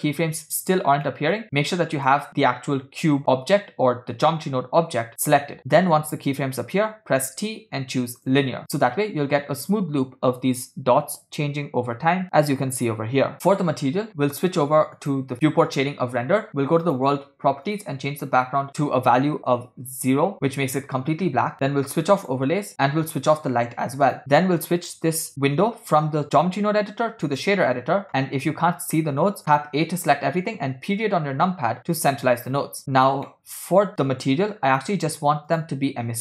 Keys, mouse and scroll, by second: 1.2 middle click, 2.0 click, 7.1 t, 8.8 space, 13.4 space, 15.3 click, 16.8 click, 17.7 click, 19.7 0, 22.3 click, 23.4 click, 24.2 click, 25.1-27.5 drag, 29.0 middle click, 29.8 a, 30.9 KP_Decimal, 32.2 scroll down 1, 32.4 scroll down 1, 32.6 scroll up 3, 32.9 click, 33.3-34.4 middle drag, 34.7 scroll up 6, 35.5 click.